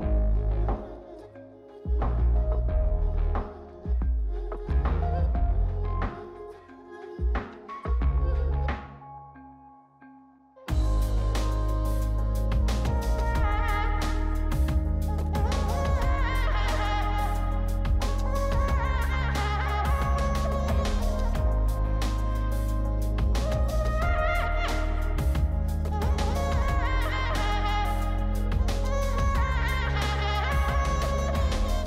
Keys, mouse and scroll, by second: 1.1-2.0 typing, 12.2 double click.